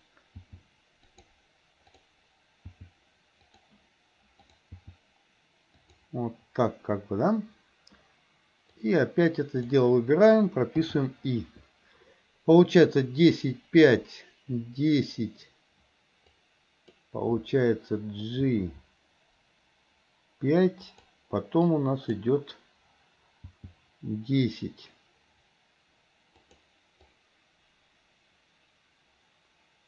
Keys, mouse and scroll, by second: 0.5 g, 2.8 g, 4.4 click, 4.8 g, 8.9-9.8 drag, 16.3-17.0 drag, 18.5 g, 21.8-22.1 drag, 23.6 g, 27.1-29.8 drag.